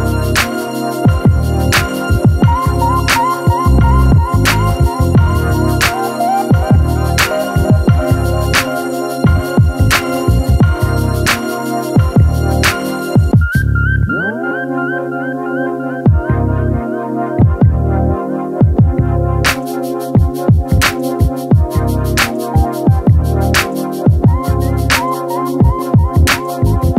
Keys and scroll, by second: 9.6 ctrl+alt+z, 23.3 ctrl+z.